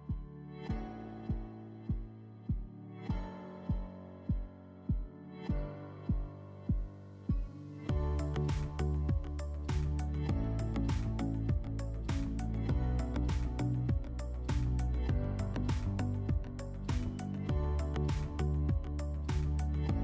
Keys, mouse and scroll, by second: 1.3-1.9 scroll, 3.6 click, 6.4 click, 7.4 ctrl+click, 8.0 ctrl+click, 11.5 click, 14.7 click, 16.3 ctrl+click, 17.3 click, 18.5 click, 19.4 ctrl+click.